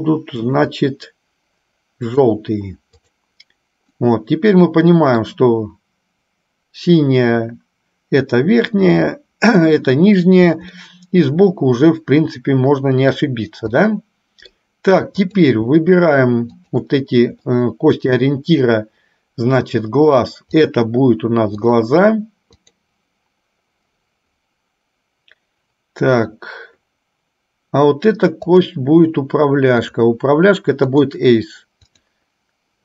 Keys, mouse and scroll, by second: 0.5 shift+click, 3.3 click, 4.2-5.5 middle drag, 10.9-13.4 middle drag, 14.0 middle click, 15.4 click, 16.7 shift+click, 17.7 middle click, 20.8-22.0 drag, 22.9 click, 28.5 click, 30.0-31.3 drag, 32.0 click.